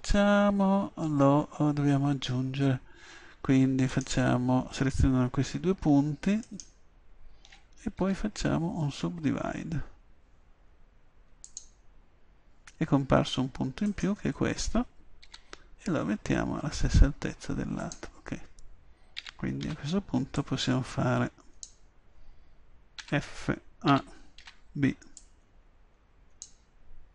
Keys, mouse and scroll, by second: 8.0 w, 15.3 g, 15.9-17.9 middle drag, 17.9 click, 19.2 a, 19.6 b, 19.7-22.0 drag, 23.1 f, 23.9 a, 24.4 b.